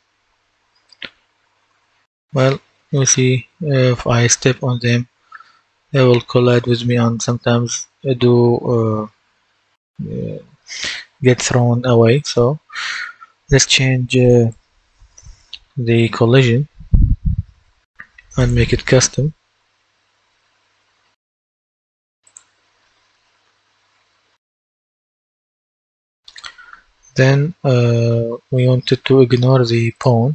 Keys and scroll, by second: 0.6-3.1 typing, 4.2-5.2 typing, 6.6-7.7 typing, 12.2 Escape.